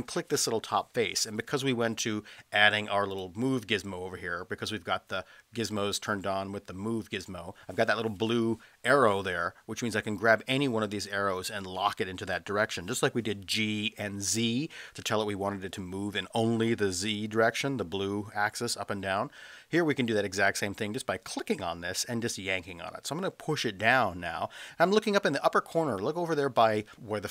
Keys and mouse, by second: 3.3-7.1 drag, 20.9-27.3 drag.